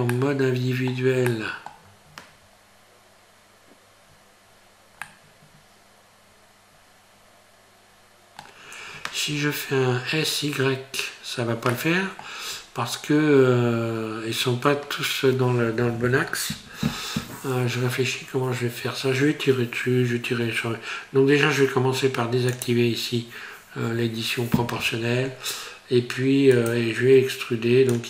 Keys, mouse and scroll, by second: 0.1 middle click, 1.3 middle click, 4.5-5.1 scroll up 1, 5.1 middle click, 11.7 middle click, 12.5-14.8 scroll up 2, 22.5 click, 26.5 click.